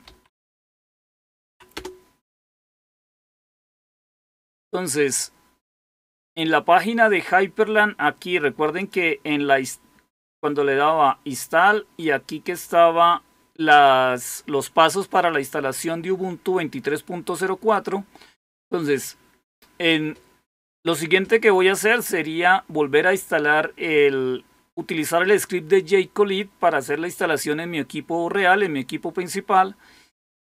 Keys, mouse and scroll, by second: 0.0-1.2 typing, 1.4 Down, 1.7 Return, 4.1 click, 8.7 click, 11.2-13.0 scroll down 1, 13.7 click, 17.6-18.1 scroll down 2.